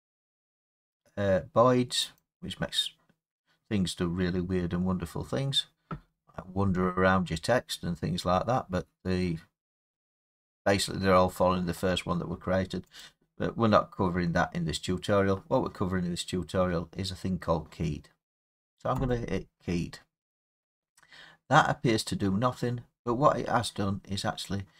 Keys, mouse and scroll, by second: 2.2 click, 13.0 click, 19.0 click, 22.8-23.8 scroll, 23.8 scroll.